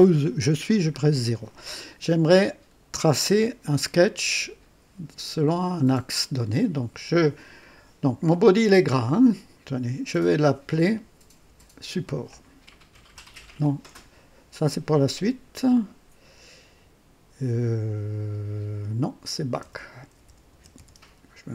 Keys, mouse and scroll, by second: 6.0 click, 10.2 click, 11.4 F2, 13.0 typing, 19.5-21.5 typing.